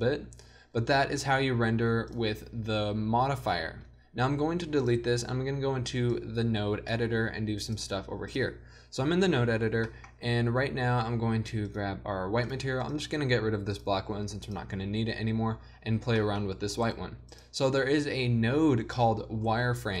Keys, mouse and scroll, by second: 0.4 middle click, 0.9 z, 4.9-6.2 drag, 9.2 n, 17.0 g.